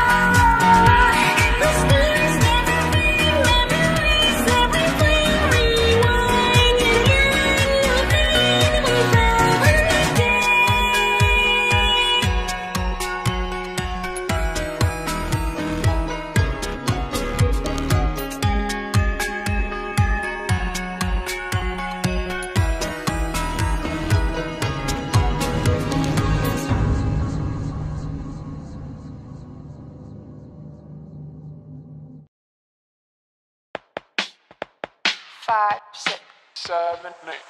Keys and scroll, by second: 1.0 F9, 11.5 F9, 25.3-28.1 typing, 25.7 Return, 27.6 Return, 27.9 Return, 28.6 ctrl+a, 30.2 typing.